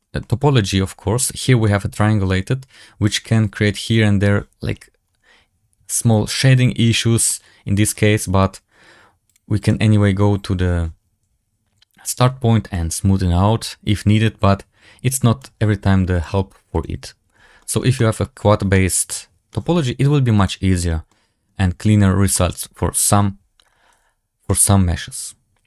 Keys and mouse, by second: 0.1-1.5 middle drag, 3.0-4.3 drag, 7.2-7.7 middle drag, 9.4-10.8 drag, 13.0-15.3 drag, 16.2-17.4 drag, 17.5 shift+middle drag, 17.9 middle drag, 18.6 shift+middle click, 20.3 middle click, 21.0-21.3 middle drag, 22.2 shift+middle drag, 24.4-25.6 middle drag.